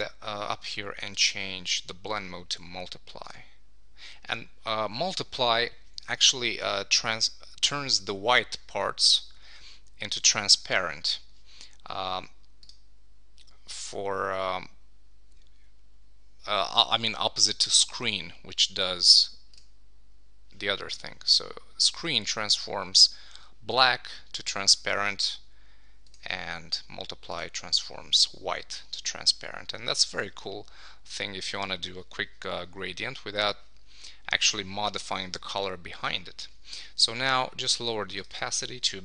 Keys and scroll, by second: 29.9 super+s.